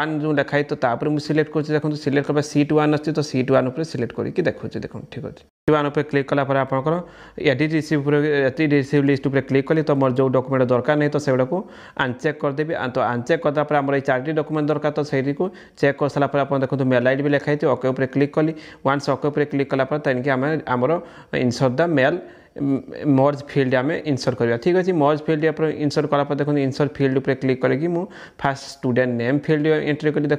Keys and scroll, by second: 27.6 shift+a, 28.4 ctrl+?.